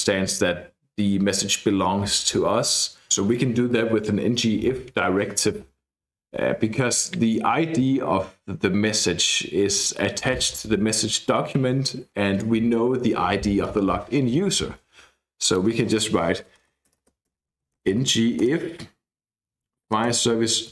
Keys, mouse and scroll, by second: 15.4 click, 15.9-18.6 typing, 19.9 Return, 20.1-20.7 typing.